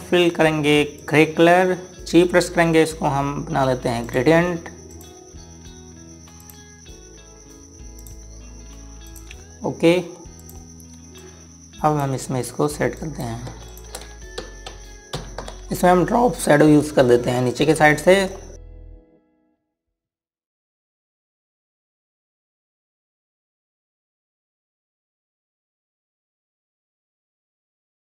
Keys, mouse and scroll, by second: 1.8 click, 3.1 g, 4.8 click, 14.5 click, 18.8 click, 22.7 click, 23.5 KP_5, 23.6 KP_Enter, 25.0 click, 25.4 KP_4, 25.5 KP_Enter, 26.3 click, 26.8 scroll down 1, 27.0 click.